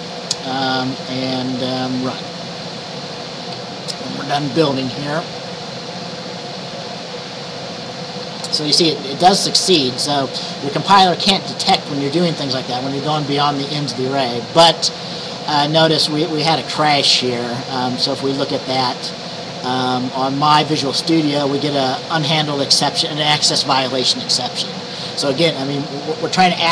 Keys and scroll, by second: 8.3 F5.